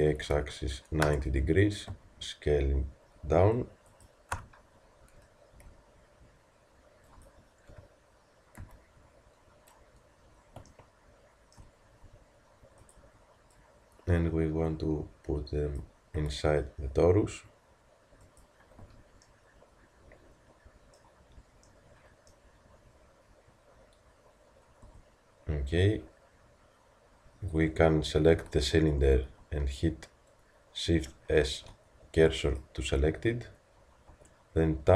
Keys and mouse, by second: 1.9 s, 5.6 s, 8.7 z, 18.9 z, 24.9 Tab, 28.5 z, 29.4 z, 34.1 shift+Tab.